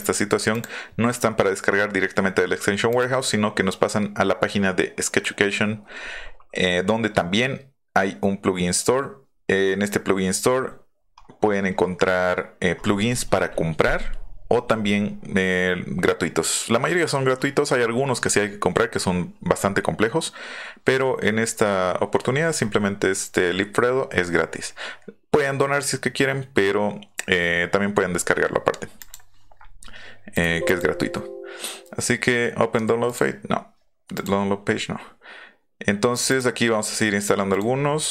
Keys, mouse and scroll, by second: 0.5 click, 2.9 click, 9.6 scroll down 2, 10.7-12.1 scroll down 10, 13.4-14.4 scroll up 4, 15.0 scroll up 2, 17.3-18.1 scroll down 5, 19.6-20.2 scroll up 1, 20.3-20.7 scroll up 3, 24.1 scroll down 1, 24.2 middle click, 29.0 click, 30.3 click, 30.6 click, 33.0 click, 34.1 click, 36.1 click, 36.3 click.